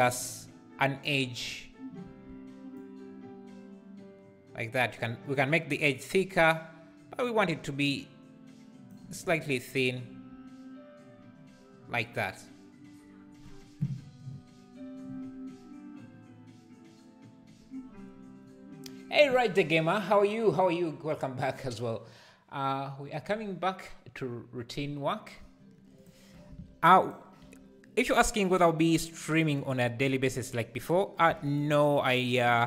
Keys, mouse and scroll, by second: 27.1 click, 27.5 /, 29.7 click, 31.6 x, 32.0 click.